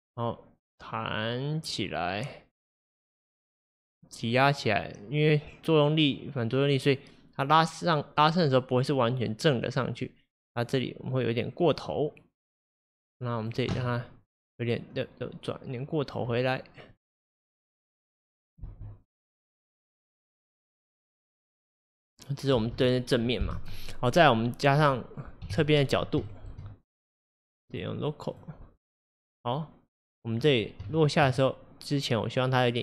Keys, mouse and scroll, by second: 0.2-3.2 drag, 15.0 click, 17.0-18.7 drag, 18.7 space, 22.6 space, 25.5 KP_3, 26.3-27.7 shift+middle drag, 27.7-32.8 drag, 30.9-32.5 shift+middle drag.